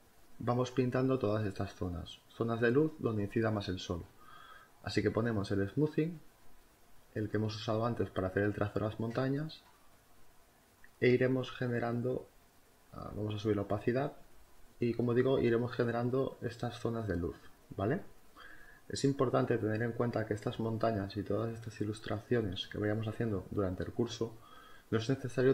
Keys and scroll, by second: 1.1 space, 5.3 space.